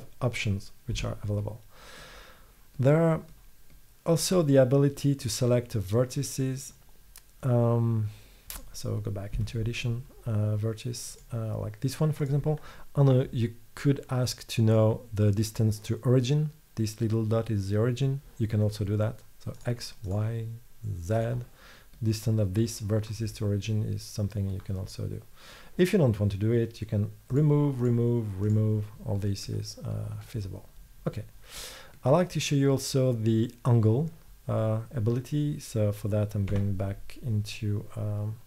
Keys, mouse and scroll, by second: 1.0 Tab, 9.3 middle click, 9.4 Tab, 11.2-12.3 drag, 19.7-22.1 drag, 22.1-23.3 middle drag, 26.8 middle click, 29.3-30.3 middle drag, 36.6 Tab.